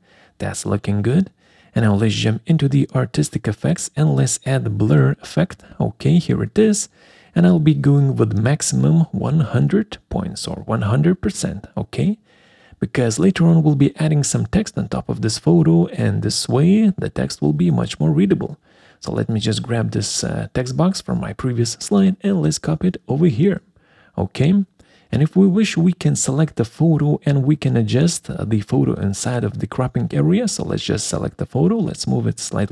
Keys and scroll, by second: 19.1 ctrl+c, 21.5 ctrl+v.